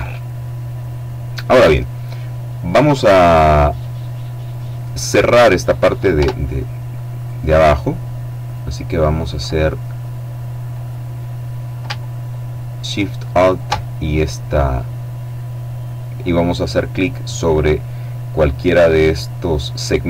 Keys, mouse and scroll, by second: 3.5-4.7 middle drag, 5.8 Tab, 6.8 right click, 7.2-7.9 scroll up 1, 8.1 right click, 12.9 alt+shift+right click, 13.9-14.5 scroll down 1, 14.5-15.0 scroll up 1, 16.4-16.9 scroll up 1.